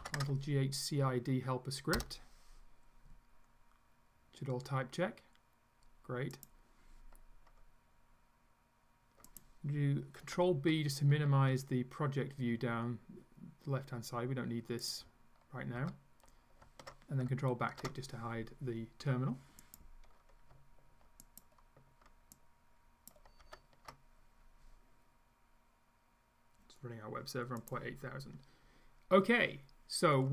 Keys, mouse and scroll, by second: 0.0-0.6 typing, 2.0 Return, 6.4 click, 9.3 click, 14.9 ctrl+click, 15.8 ctrl+b, 17.7 ctrl+`, 19.7 click, 21.2 ctrl+click, 22.4 ctrl+click, 27.6 click, 30.2-30.3 scroll up 5.